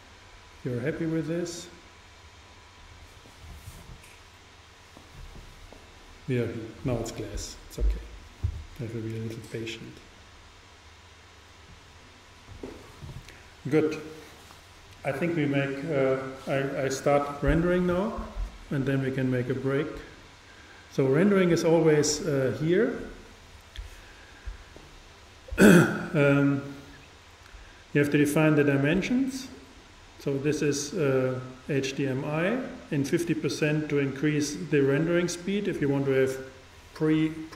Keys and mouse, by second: 0.7-2.4 drag.